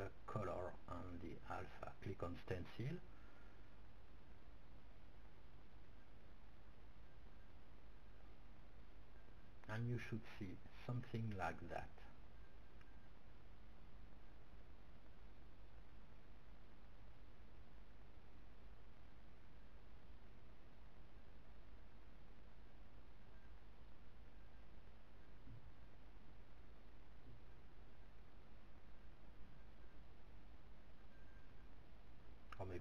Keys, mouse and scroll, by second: 1.6-2.6 middle drag, 2.9-4.9 drag, 4.9 middle click, 8.6-9.9 middle drag, 9.0-10.8 drag, 11.4-13.0 drag, 16.0-17.1 middle drag, 17.1-18.0 scroll up 1, 21.6-24.1 middle drag, 25.7-26.8 middle drag, 30.8 middle click, 31.3-32.8 drag.